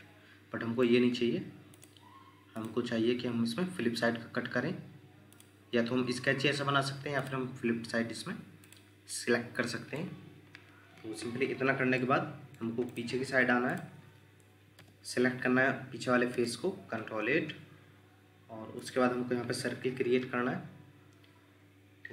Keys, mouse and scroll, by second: 9.1 middle click, 10.0 scroll down 1, 10.2 scroll up 1, 12.0 middle click, 16.3 ctrl+8.